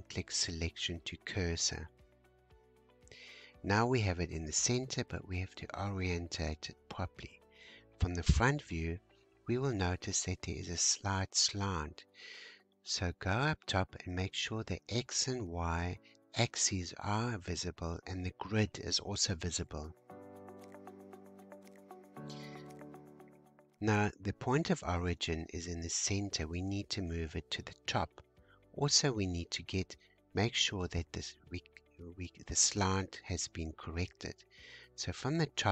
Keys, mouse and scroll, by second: 0.6-1.6 scroll up 4, 1.6-3.9 shift+middle drag, 3.9 `, 6.0-6.4 scroll up 2, 6.7-9.7 shift+middle drag, 12.6-15.8 drag, 22.0-23.2 shift+middle drag, 23.2-24.6 scroll up 1, 25.8 scroll up 2, 26.6 shift+middle click, 27.1-27.8 shift+scroll up 1, 35.0-35.7 scroll up 4.